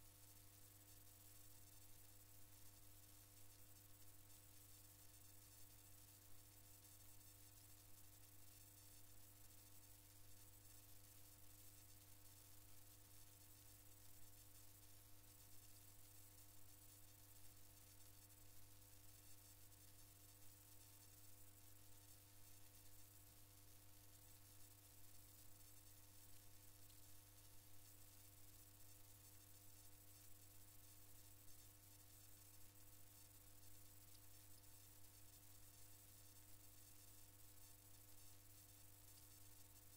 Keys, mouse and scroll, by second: 5.8-7.5 drag, 10.0 click, 11.8-14.2 drag, 16.7-20.8 drag, 21.6-24.9 drag, 25.8-28.1 drag, 28.9 click.